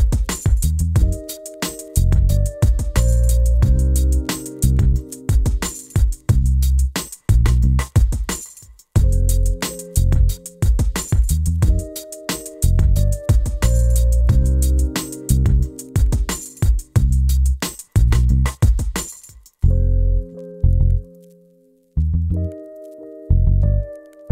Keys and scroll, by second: 18.8-20.7 typing.